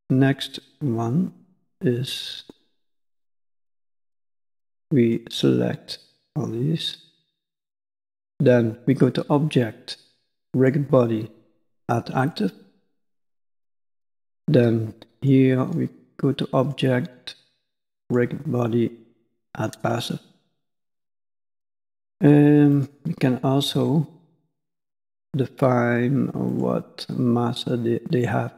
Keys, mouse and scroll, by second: 1.5 scroll down 1, 1.6 middle click, 3.7 click, 4.2 b, 5.6 b, 7.4 middle click, 8.9 click, 12.8 middle click, 15.1 click, 16.5 click, 20.4 middle click, 21.3 middle click, 22.7 click, 23.6 b, 26.4 click.